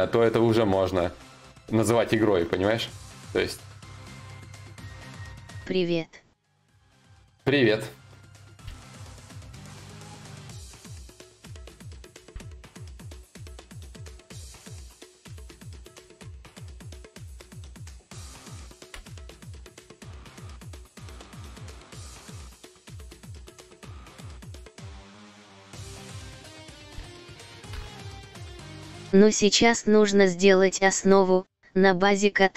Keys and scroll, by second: 10.1 ctrl+z, 10.1 y, 14.6 ctrl+z, 15.2 ctrl+z, 18.6 ctrl+z, 18.6 y, 27.8 ctrl+z, 27.8 y.